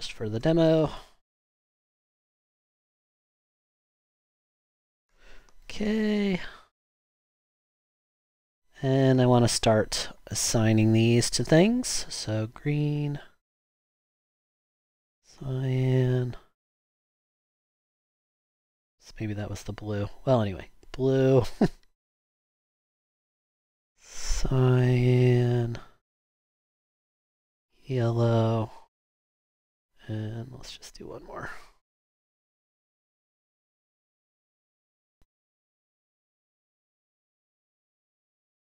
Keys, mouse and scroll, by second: 0.0-5.6 typing, 31.9 super+d.